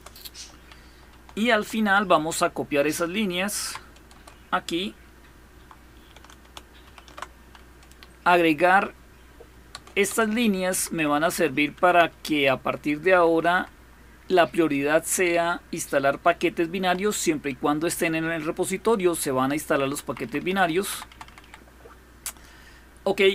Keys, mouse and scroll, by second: 1.1-3.5 typing, 3.9 Return, 6.0-7.5 typing, 9.5 Return, 9.9 Return, 10.5 Up, 10.7 Up, 10.9 Up, 11.1 Up, 11.5 Up, 12.9 Down, 13.1 Down, 13.3 Down, 13.5 Down, 16.6 Down, 19.7 Up, 19.9 Up, 20.0 Up, 20.2 Up, 20.4 Up, 20.7 Down, 20.9 Down, 21.1 Down, 21.2 Down, 21.4 Down, 21.5 click.